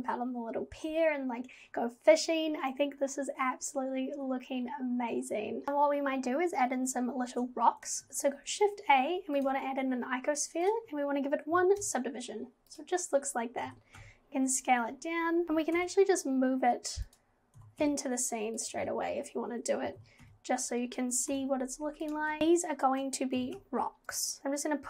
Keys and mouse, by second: 5.6 click, 8.0 shift+a, 10.8 click, 13.7 g, 15.5 g, 17.6 g, 20.0 g, 23.4 g, 24.4 g.